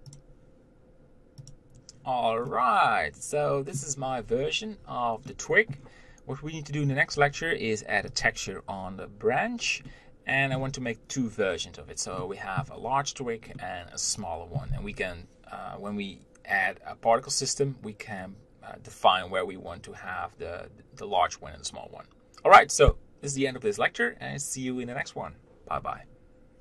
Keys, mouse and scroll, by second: 1.7-2.7 scroll down 1, 2.7-4.2 middle drag, 4.2-5.5 scroll up 1, 5.5-8.4 middle drag, 8.4-10.1 drag, 10.1-26.4 middle drag.